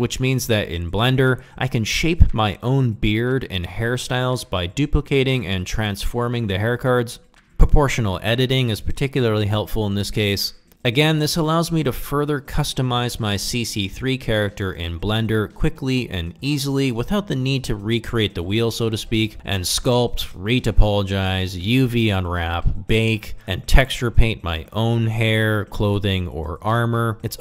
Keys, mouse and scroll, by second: 0.0-1.2 typing, 0.4 middle drag, 0.7 ctrl+Tab, 1.4 click, 1.6 click, 1.8 click, 2.0 click, 2.3 click, 2.4 middle click, 2.6 middle click, 2.8 click, 3.0 click, 3.5 click, 3.8 click, 4.0 ctrl+Tab, 4.2 shift+middle click, 4.4 middle drag, 4.5 Tab, 4.6 a, 4.7 s, 4.8 click, 4.9 g, 4.9 z, 5.2 drag, 5.4 middle click, 5.6 Tab, 6.0 ctrl+middle click, 6.2 middle drag, 6.3 ctrl+middle click, 6.6 ctrl+middle click, 6.7-7.2 middle drag, 7.3 Tab, 7.6-9.5 typing, 8.0 click, 8.1 middle click, 9.0 middle click, 9.9 click, 10.0 Tab, 10.1 drag, 10.2 middle click, 10.4 middle click, 10.6 middle click, 10.8 Tab, 11.0-13.0 typing, 11.3 drag, 11.5 middle click, 11.9 middle click, 12.6 middle click, 13.3 click, 13.4 Tab, 13.5 click, 13.8 middle drag, 14.0 ctrl+middle click, 14.0 alt+z, 14.2-19.9 typing, 19.5 ctrl+i, 20.4 ctrl+middle click, 20.6 middle click, 21.3 click, 22.1 shift+middle drag, 22.3 f, 22.6 g, 24.2 click, 24.5-27.4 typing, 24.8 click, 24.9 click, 25.6 click, 25.8 click, 26.4 click, 26.8 click, 27.1 click.